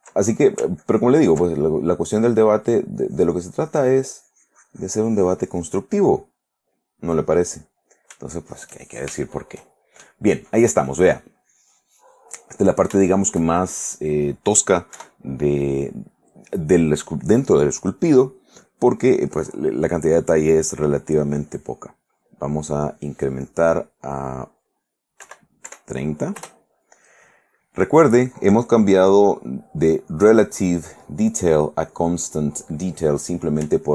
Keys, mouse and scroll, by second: 0.4 ctrl+middle click, 1.0 ctrl+click, 1.7 ctrl+middle click, 2.6 middle click, 3.2-5.7 drag, 6.4 middle click, 7.3 middle click, 8.3 shift+middle click, 9.0 shift+middle click, 10.3-14.5 middle drag, 13.5 shift+right click, 15.1 KP_1, 23.4-25.0 scroll down 2, 25.4 3, 25.8 0, 26.6 Return, 29.8 click, 32.4 click.